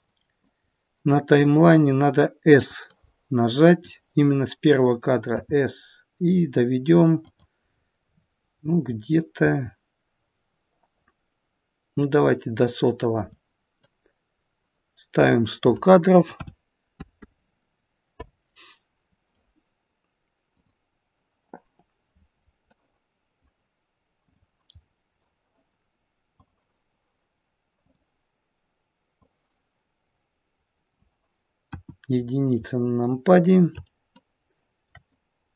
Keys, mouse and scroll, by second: 0.5-2.6 scroll down 4, 2.6 click, 29.3 click.